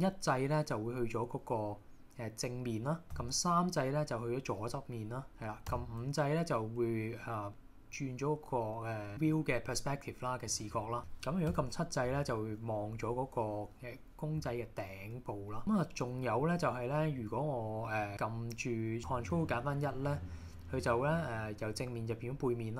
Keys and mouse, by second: 3.2 KP_3, 5.7 KP_5, 7.1 middle click, 7.5-9.1 middle drag, 10.6 KP_5, 11.0 middle click, 11.6 KP_7, 19.0 ctrl+shift+KP_1, 19.5 shift+KP_1.